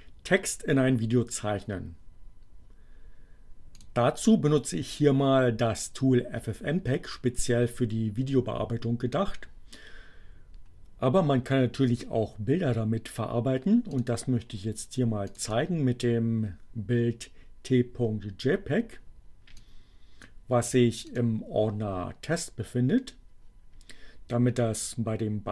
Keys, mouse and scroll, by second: 3.8 click, 11.6-14.2 drag, 15.3 click, 19.5 click, 21.2 click, 24.8-25.5 drag.